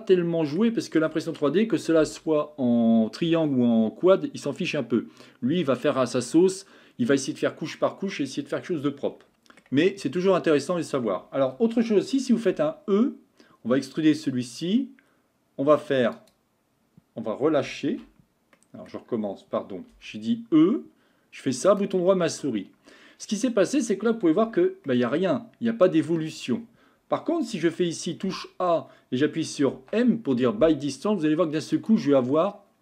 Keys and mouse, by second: 9.3 middle click, 10.6 middle click, 13.2 e, 18.0 ctrl+z, 18.6 middle click, 20.5 e, 22.3-23.8 middle drag, 24.5 Tab, 24.9-26.1 middle drag, 26.4 Tab, 27.8 a, 28.3 a, 29.7 m.